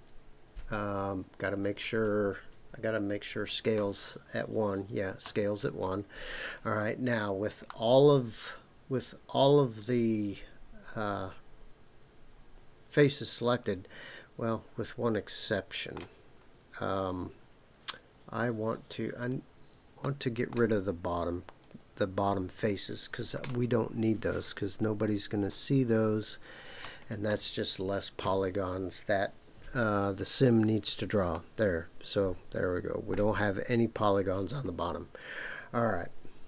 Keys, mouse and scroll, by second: 3.8 Tab, 5.1 Tab, 7.6-16.0 middle drag, 19.2 click, 20.0 middle click, 21.6 click, 24.2 shift+click, 25.5-26.7 shift+drag, 28.2 Delete, 31.3-33.1 middle drag.